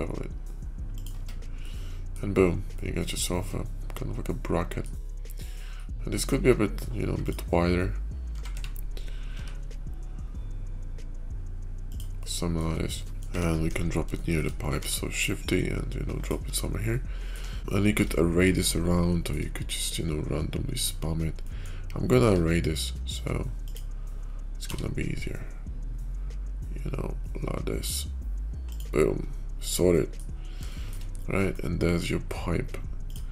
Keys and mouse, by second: 1.1 Tab, 1.4-2.1 middle drag, 2.6-4.7 middle drag, 5.2-5.7 middle drag, 6.0 click, 8.1 s, 12.0-12.5 middle drag, 13.0 middle click, 13.6 KP_5, 14.1 shift+middle drag, 14.8 shift+d, 16.8-17.2 middle drag, 17.5 shift+middle click, 17.5 shift+KP_5, 18.4-19.2 shift+middle drag, 20.5 middle click, 21.3 middle click, 22.1 q, 30.1-30.8 middle drag, 30.9-32.2 middle drag.